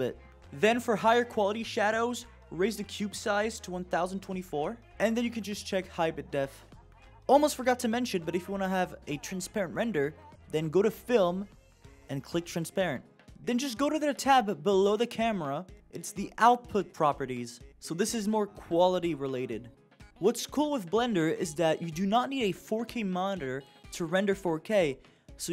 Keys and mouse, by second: 0.5 click, 1.5-3.5 drag, 6.0 click, 11.3 click, 14.6 click, 23.0-25.5 drag.